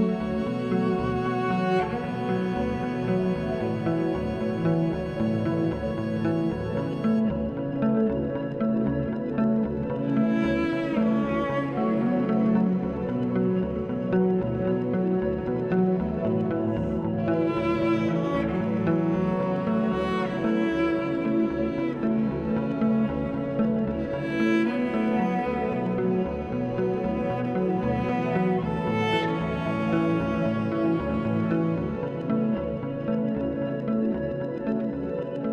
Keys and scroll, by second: 1.6 z, 15.4 z, 20.9 [, 22.3 ctrl+=, 22.8 [, 32.6 [, 33.3 [, 35.4 ctrl+z.